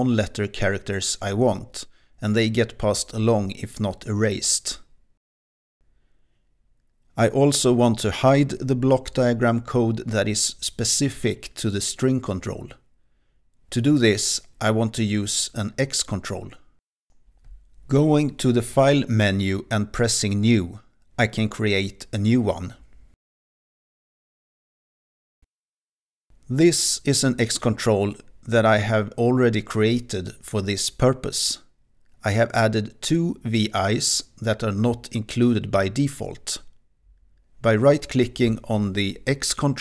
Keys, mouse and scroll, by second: 0.0-1.0 typing, 3.4 click, 6.9 Return.